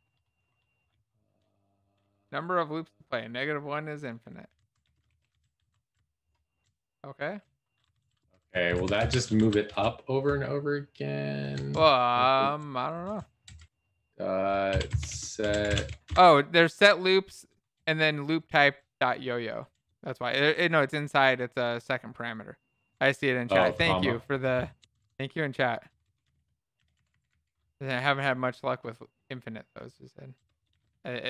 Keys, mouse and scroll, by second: 5.9 ctrl+s, 5.9 Down, 6.4 Left, 9.6 ctrl+s, 9.6 Down, 9.6 End, 10.2 Left, 10.7 Left, 11.3 Left, 13.0 Left, 16.0 s, 19.5 BackSpace, 22.7 Left, 22.7 BackSpace, 23.3 Left, 26.8 BackSpace, 27.7 p, 27.9 Down, 27.9 ,, 27.9 space, 28.2 Return.